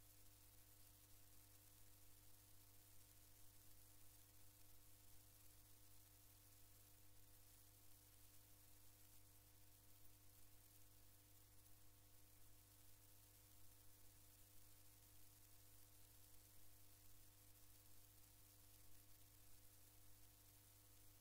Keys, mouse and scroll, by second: 4.1-6.0 drag, 7.1 click, 9.0 click, 13.4 click, 16.9-20.1 drag.